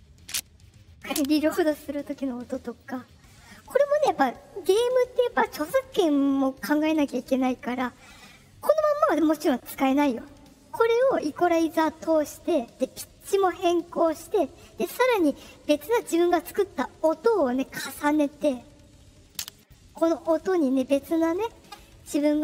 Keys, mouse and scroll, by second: 0.9 click, 2.7 click, 19.2 click.